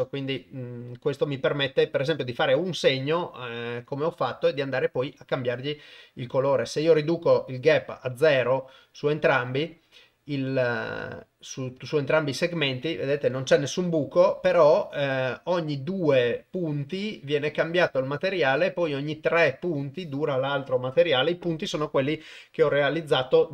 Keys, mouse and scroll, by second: 7.1-8.1 drag, 9.1 click.